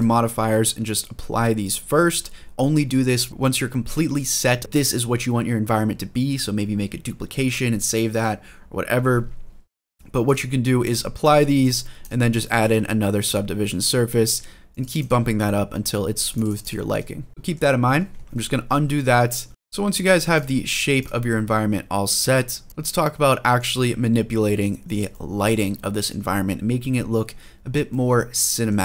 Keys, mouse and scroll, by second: 3.3-3.9 scroll down 1, 3.9 middle click, 10.0-10.7 drag, 11.0-11.4 drag, 11.8-13.1 drag, 14.5 click, 16.0 click, 16.4 click, 16.9-17.3 scroll up 2, 17.3 middle click, 17.3 scroll down 2, 17.7 ctrl+z, 17.9 ctrl+z, 18.0 ctrl+z, 18.3 ctrl+z, 18.4 ctrl+z, 18.6 ctrl+z, 18.7 ctrl+z, 18.9 ctrl+z, 19.2 ctrl+z, 19.7-22.5 drag, 22.7 middle click, 22.7 click, 22.9-24.7 middle drag, 24.9-25.9 shift+middle drag, 26.7-27.1 scroll down 2, 27.3 scroll up 1, 27.7-28.5 middle drag, 28.7 scroll down 2.